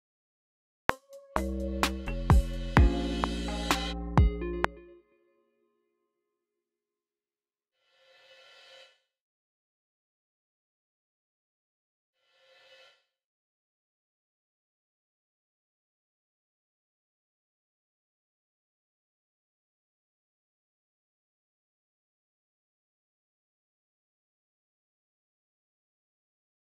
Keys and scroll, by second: 0.8-2.4 typing, 4.7 super+k, 5.0 y, 6.4 e, 6.8 super+a, 13.0 typing, 14.0 ctrl+b, 15.1 Return, 21.1 ctrl+alt+b, 21.4 alt+Left, 23.1 ctrl+alt+d, 23.4 alt+Right, 25.0 alt+Left.